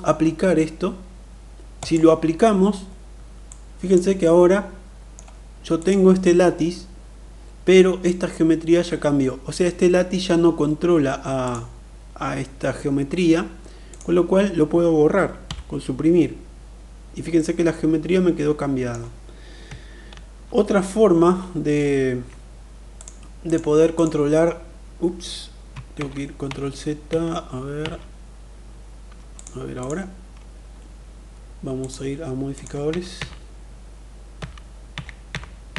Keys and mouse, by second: 3.2-3.7 drag, 4.0-4.9 middle drag, 5.5 click, 11.1 click, 15.3 Delete, 17.1-18.7 middle drag, 19.8 ctrl+z, 20.8 ctrl+z, 22.6 click, 23.6 click, 25.6 ctrl+z, 26.2 ctrl+z, 26.8 ctrl+z, 27.5 ctrl+z, 29.0 click, 31.6 click, 32.6 ctrl+z, 32.8 ctrl+z, 34.1 ctrl+z, 34.5 ctrl+z, 35.0 ctrl+z, 35.4 ctrl+z.